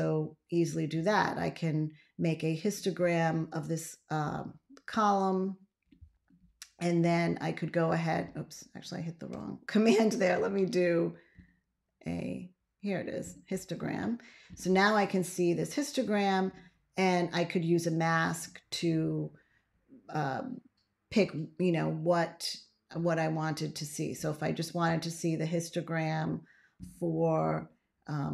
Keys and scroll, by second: 9.2 BackSpace.